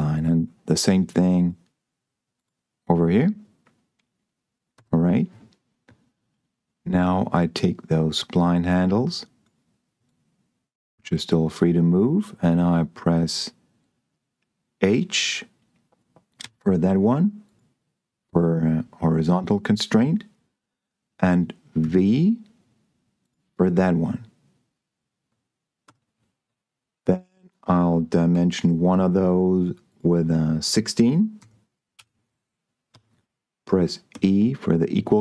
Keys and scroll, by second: 5.0 Escape, 16.9 h, 22.1 v, 26.1 Escape, 28.6 d, 31.3 6, 31.9 Return, 32.8 Escape, 34.1 e.